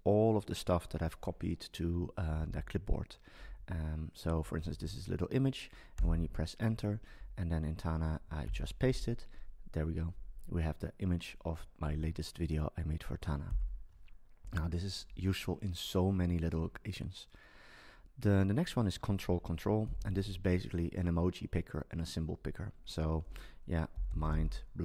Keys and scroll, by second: 2.3 Down, 4.8 Up, 8.4 super+v, 13.5 BackSpace.